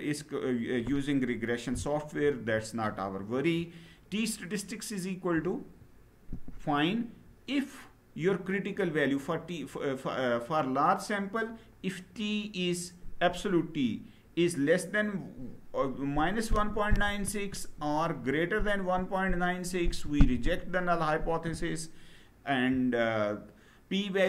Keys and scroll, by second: 2.0 Down.